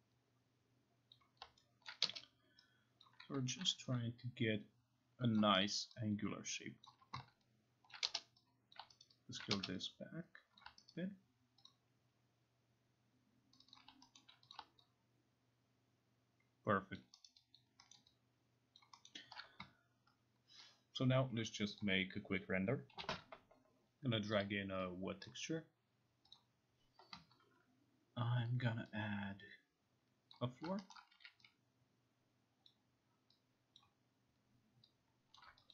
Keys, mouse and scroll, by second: 1.2 click, 1.9 middle click, 3.1 click, 3.7 t, 5.4 click, 5.8 alt+right click, 6.9 alt+click, 7.9 alt+click, 8.8 click, 9.0 alt+right click, 10.6 click, 10.9 alt+right click, 11.7 click, 13.6 click, 13.8 click, 14.2 alt+middle click, 14.5 click, 15.1 click, 17.0 alt+click, 17.3 alt+right click, 18.0 alt+middle click, 18.8 alt+click, 19.1 alt+middle click, 21.8 click, 23.0 Home, 23.0 click, 24.4 click, 25.3 click, 26.4 click, 31.0 alt+middle click, 31.2 e, 32.7 click, 33.8 click, 35.4 click.